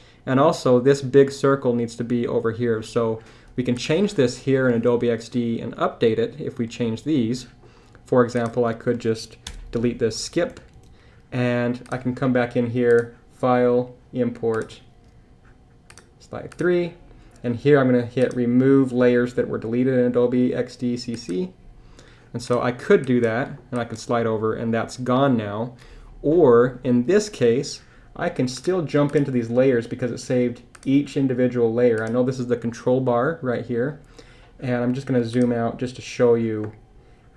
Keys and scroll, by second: 9.5 super+BackSpace, 10.5 super+BackSpace, 10.7 super+Tab.